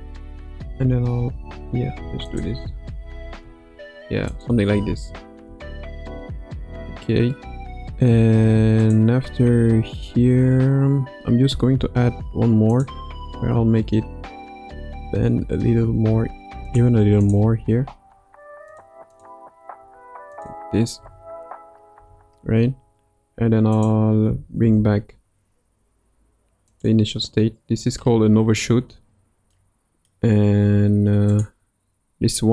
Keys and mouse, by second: 0.0 Right, 0.2 Right, 0.4 Right, 0.5 Right, 0.7 Right, 0.9 Right, 1.0 Right, 1.2 Right, 1.9 Right, 2.3-2.6 drag, 2.6 space, 3.4 space, 4.4-4.7 drag, 4.7 space, 6.4 space, 8.8 click, 11.6 Right, 11.8 Right, 12.7 click, 14.8 r, 18.0 r, 19.8 r, 21.0 a, 21.9 i, 23.7 click, 24.6 shift+d, 29.6 middle click, 31.3 click.